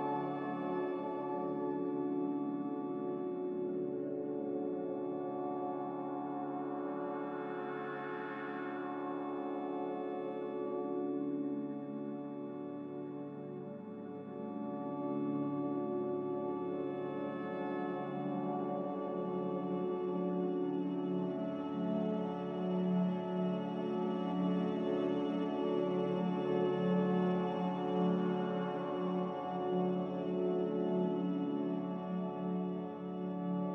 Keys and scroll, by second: 0.5 q, 4.7-5.1 typing, 9.8 z, 12.4-12.9 typing, 17.4 typing, 17.7 Return, 21.0 ctrl+z, 22.0 Return, 22.0 typing, 25.3 typing, 25.8 Return, 29.1 a, 30.1 q, 32.1 c.